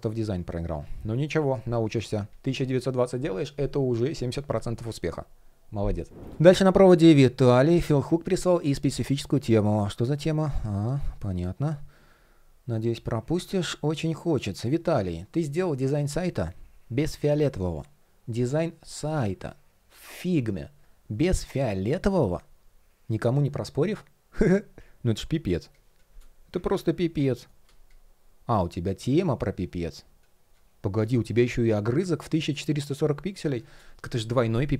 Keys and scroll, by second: 10.9 shift+o, 24.9 shift+0, 26.4 super+\, 27.0 shift+o, 31.5 shift+o.